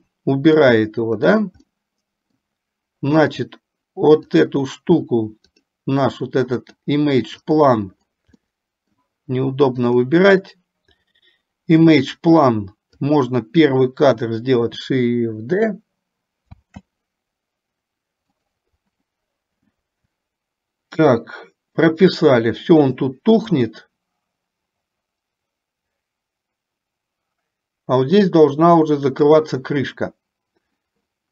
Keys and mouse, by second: 0.8 middle click, 1.9 middle click, 4.4 click, 6.7 click, 7.6 click, 9.9 click, 13.2 click, 16.7 shift+d, 23.8-29.6 drag.